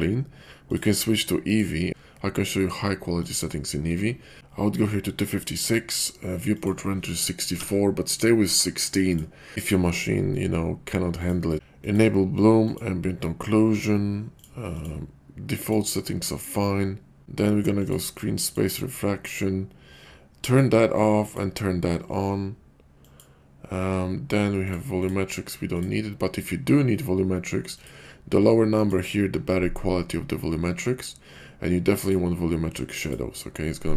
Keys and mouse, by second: 0.5-1.5 drag, 3.2-4.4 drag, 6.6-9.2 drag, 11.2 click, 11.7 click, 12.6 click, 14.4 click, 14.8 click, 15.6 click, 16.3 click, 17.7 click, 18.5 click, 20.3 click, 21.2 click, 22.9 click, 24.7 click, 25.0 click, 25.6 click, 27.7-28.9 drag, 31.9 click.